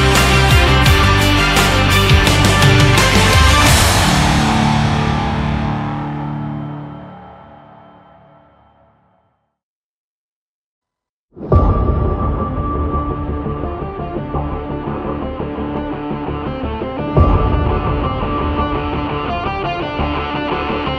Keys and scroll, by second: 4.8 ctrl+0, 5.0 ctrl+-.